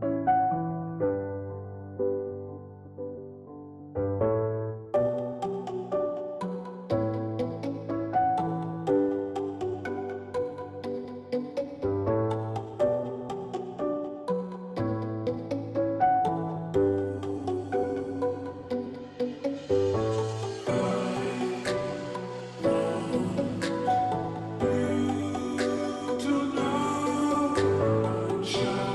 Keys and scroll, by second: 8.0 ctrl+g.